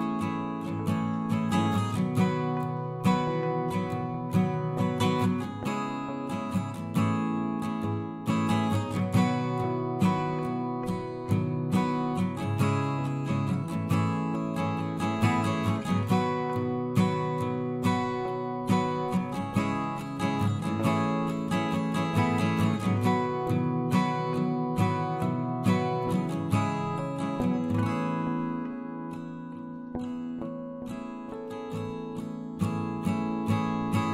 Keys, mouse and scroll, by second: 2.0 a, 5.8-11.9 right drag, 14.3 ctrl+KP_Add, 14.7 ctrl+KP_Add, 15.0 ctrl+KP_Add, 15.2 ctrl+KP_Add, 15.5 ctrl+KP_Add, 17.1 ctrl+KP_Add, 17.2 ctrl+KP_Add, 20.0 ctrl+KP_Add, 21.3-25.6 middle drag, 25.7-26.9 middle drag, 27.1 middle click, 31.6 x.